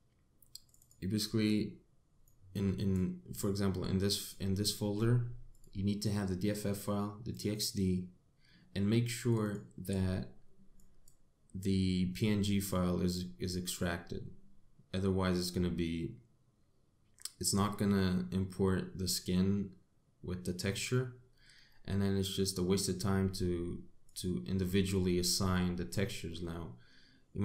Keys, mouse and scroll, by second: 26.3 middle click.